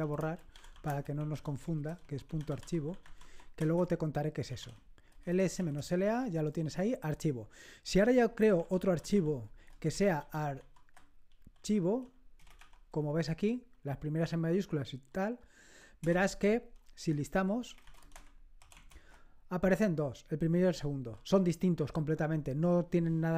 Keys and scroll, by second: 0.0-6.2 typing, 8.2-13.0 typing, 16.0 Return, 16.7-19.2 typing.